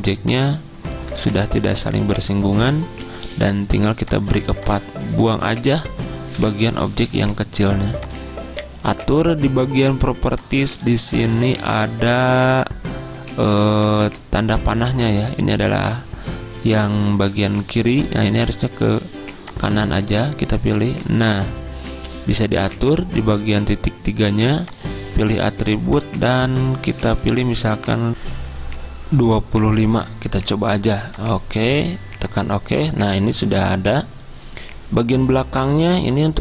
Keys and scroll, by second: 6.5 Delete, 29.7 typing.